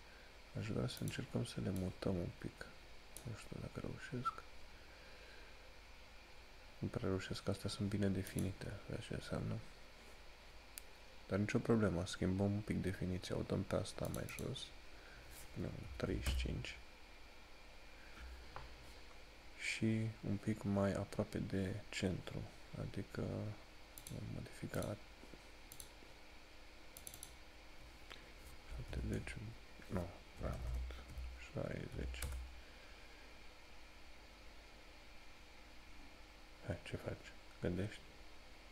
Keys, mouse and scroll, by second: 8.6 click, 14.2 click, 24.1 click.